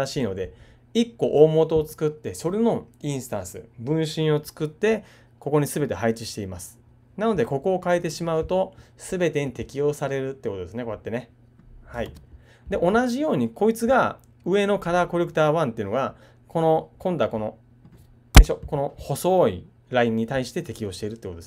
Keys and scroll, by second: 12.0 super+z.